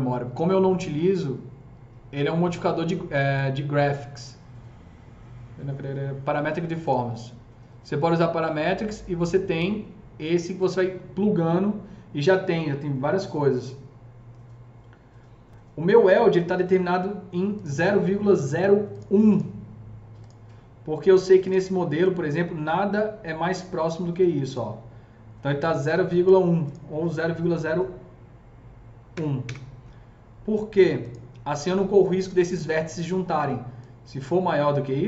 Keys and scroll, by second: 29.1 KP_0, 29.4 Return.